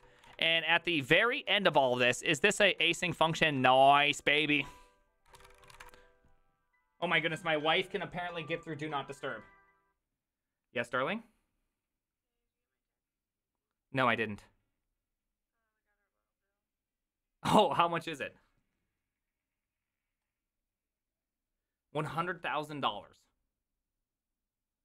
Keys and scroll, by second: 0.0-0.9 typing, 0.0 Return, 0.3 ctrl+d, 0.5 ctrl+d, 1.4 ctrl+u, 1.8 ctrl+u, 3.2 ctrl+d, 3.5-6.4 typing.